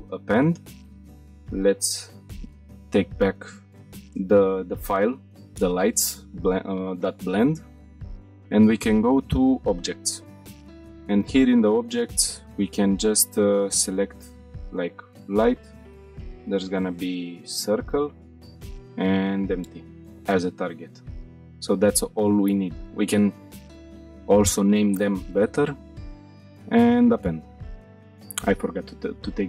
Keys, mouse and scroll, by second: 26.5-26.8 scroll up 2, 26.9-27.3 shift+middle drag, 27.4-27.7 middle drag, 27.8 middle click, 28.4-29.4 scroll up 2.